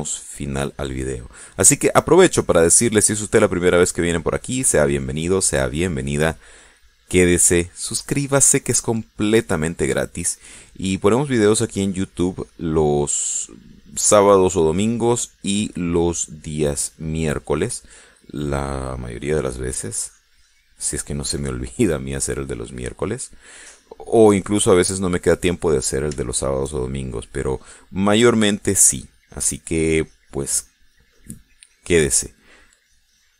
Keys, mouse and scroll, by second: 1.4 middle click, 3.6-10.1 drag, 10.2 click, 10.8-12.4 middle drag, 12.8-14.4 drag, 14.4 middle click, 15.1-18.7 drag, 18.7-22.6 drag, 22.7 middle click, 23.6-26.3 drag, 26.5 click, 27.0 middle click, 27.6 shift+middle click, 30.0-33.3 drag.